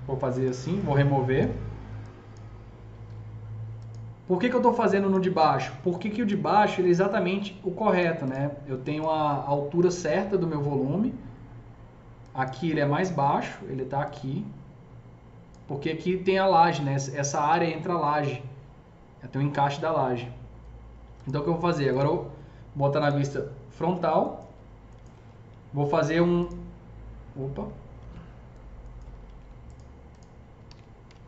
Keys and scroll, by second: 0.4 Delete, 27.9 ctrl+z, 29.1 ctrl+z, 30.5 ctrl+z.